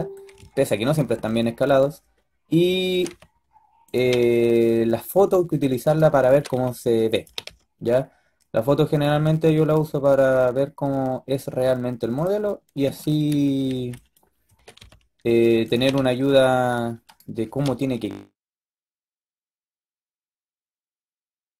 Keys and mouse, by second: 2.7 s, 3.9 g, 6.2 s, 13.6 b, 14.3 s, 15.6 g, 17.3 s, 18.1 g, 20.0 b.